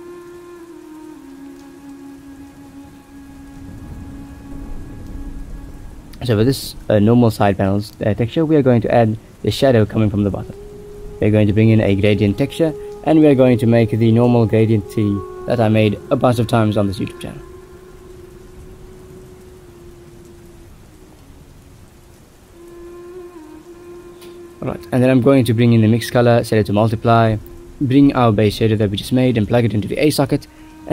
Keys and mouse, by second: 0.9 click, 2.4 click, 3.5 ctrl+z, 4.2 ctrl+s, 7.1 middle click, 12.9 middle click, 13.4 click, 14.1 shift+middle drag, 14.9 middle click, 15.4 shift+a, 18.3 ctrl+t, 19.7 drag, 20.1 shift+a, 22.2-23.1 drag, 23.7 middle click, 24.6 click, 24.7 shift+d, 25.5 middle click, 26.2-27.2 drag, 28.3-29.5 drag, 30.5 middle click.